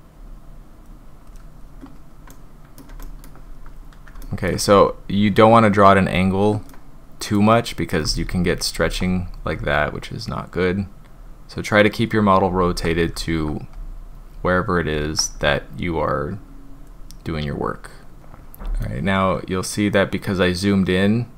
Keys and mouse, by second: 0.1-0.8 drag, 2.3-2.8 middle drag, 3.0 shift+middle drag, 4.2 shift+middle drag, 6.7 click, 8.2 ctrl+z, 8.7 ctrl+z, 9.5-10.5 drag, 11.1-12.1 drag, 12.6 ctrl+z, 13.2 ctrl+z, 13.7-14.3 drag, 15.0 ctrl+z, 15.3-15.8 drag, 16.3-16.9 drag, 18.2-18.8 middle drag, 20.2-21.2 middle drag.